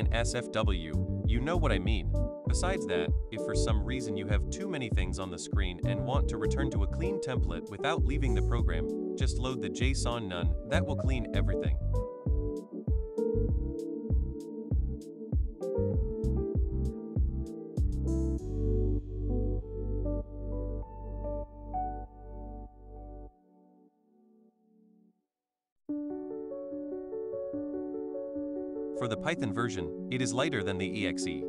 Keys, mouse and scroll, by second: 0.0 click, 1.2 click, 2.3 click, 2.7 click, 3.3 click, 4.1 click, 4.3 click, 6.7 click, 13.1 click, 13.3 click, 13.5 click, 13.6 click, 13.8 click, 19.7 click, 22.0 click, 29.5 click, 29.7 click.